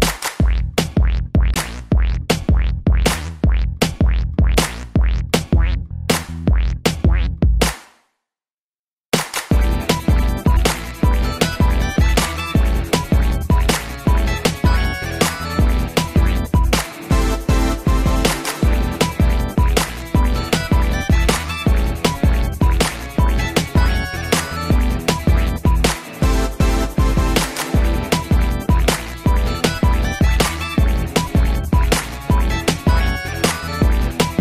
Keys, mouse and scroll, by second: 0.0 middle click, 1.2 Up, 2.0 middle click, 2.3 scroll up 2, 3.6 middle click, 4.4 middle click, 4.6 middle click, 5.4 click, 7.0 middle click, 7.9 g, 9.3 click, 9.5 click, 10.7 Down, 11.0 Down, 11.3 shift+space, 12.7 Escape, 12.8 middle click, 13.2 ctrl+s, 13.4 scroll down 2, 13.7 shift+middle click, 13.8 shift+middle click, 14.0 middle click, 14.2 double middle click, 14.2 shift+space, 16.5 middle click, 17.5 middle click, 19.0 scroll down 1, 19.3 middle click, 20.1 middle click, 28.8 middle click, 29.8 ctrl+s, 30.5 shift+middle click, 30.9 middle click.